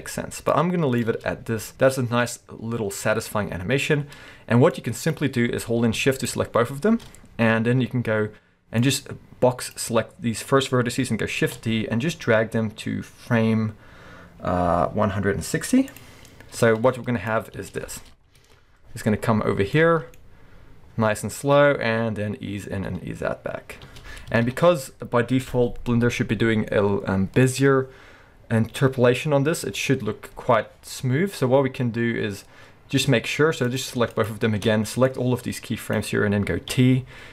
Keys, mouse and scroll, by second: 0.5-5.2 drag, 1.1 space, 4.0 space, 6.2 shift+click, 8.8 click, 11.4 shift+d, 16.0 click, 16.7-19.8 drag, 17.5 space, 18.4 alt+a, 19.4-19.8 scroll down 2, 19.8-24.5 middle drag, 20.2 scroll up 2, 23.8 space, 24.5 shift+Left, 26.7 middle click, 33.7 click, 34.1 shift+click, 35.1 click, 36.7 t.